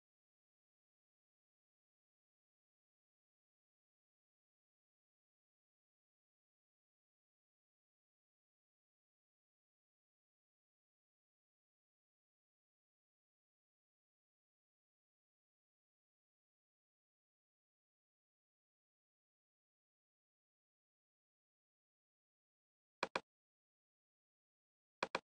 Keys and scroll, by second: 0.0-0.3 typing, 0.7 Return, 1.7-7.3 typing, 8.3 -, 9.6-14.8 typing, 16.0 space, 19.6 ctrl+p.